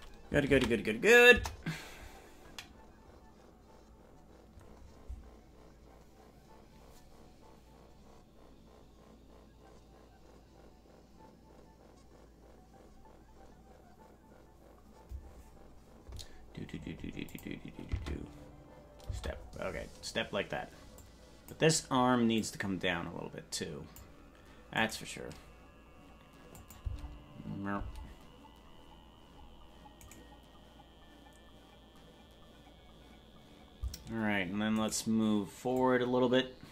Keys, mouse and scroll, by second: 3.9 ctrl+s, 3.9 space, 3.9 KP_0, 5.0-5.6 scroll up 1, 5.6-17.4 scroll up 1, 17.4 click, 21.0 click, 21.0 space, 22.3-24.0 drag, 26.6-28.6 drag, 26.6 right click, 26.8 space, 28.2 space, 30.1 right click, 35.8-36.7 drag, 35.8 right click.